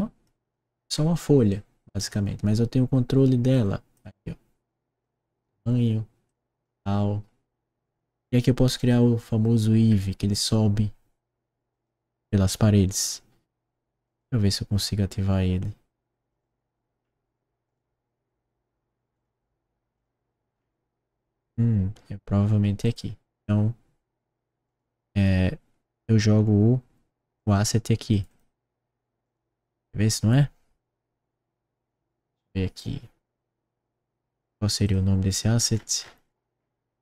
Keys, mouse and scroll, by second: 0.9 middle click, 1.5 right click, 3.5-3.9 drag, 4.9-5.3 drag, 6.2-6.5 drag, 8.7 click, 9.8 scroll down 1, 11.6 click, 14.0 click, 16.2 click, 16.9 middle click, 17.6 click, 19.0 click, 19.9 click, 20.4 middle click, 22.8 click, 24.6 click, 27.3 click, 28.1 click, 28.2 click, 29.1 click, 34.8 click, 35.7-36.9 scroll down 1.